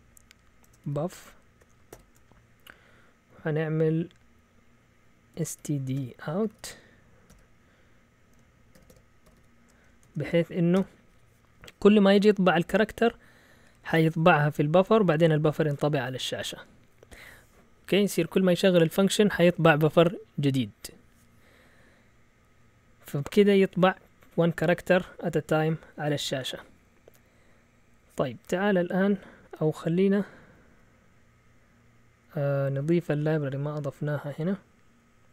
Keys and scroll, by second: 0.0-1.9 typing, 5.1-7.3 typing, 8.5-11.2 typing, 30.3 Up, 30.5 Up, 30.7 Up.